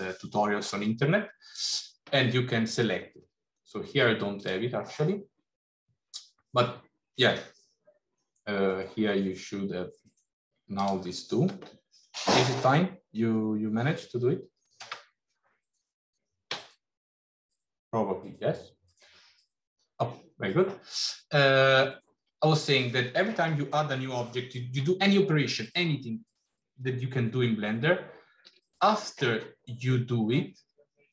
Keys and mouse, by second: 28.1 shift+a.